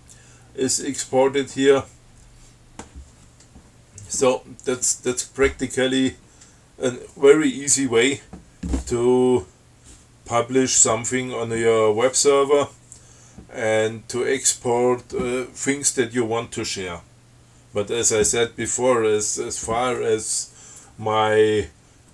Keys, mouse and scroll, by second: 1.1 click.